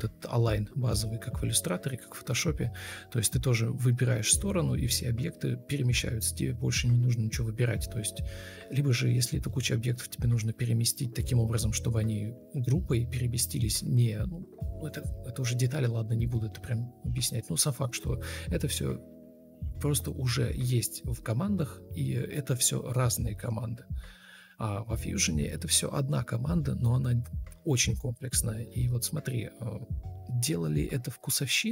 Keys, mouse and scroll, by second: 3.6 ctrl+scroll up 1, 3.8 ctrl+z, 6.6 alt+shift+c, 7.8 Escape, 7.8 Escape, 9.9 Delete, 15.1 Delete, 19.2 Delete, 20.5 Delete, 26.0 Delete.